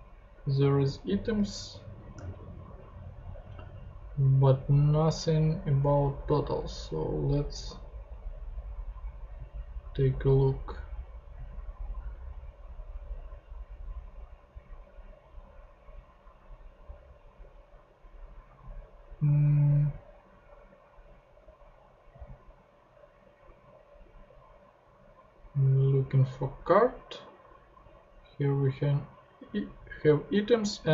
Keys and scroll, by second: 2.1 super+Tab.